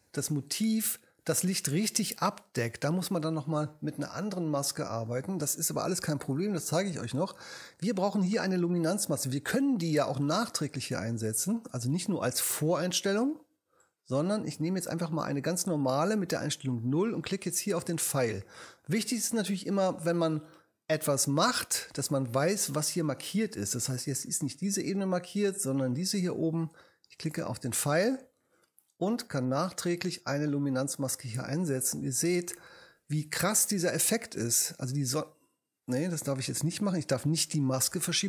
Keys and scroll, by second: 37.1 alt+super+z.